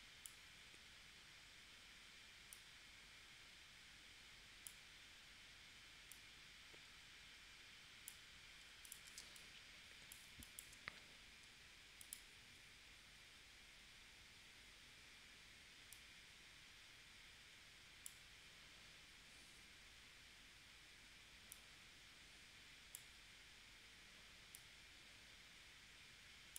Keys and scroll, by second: 9.2 space.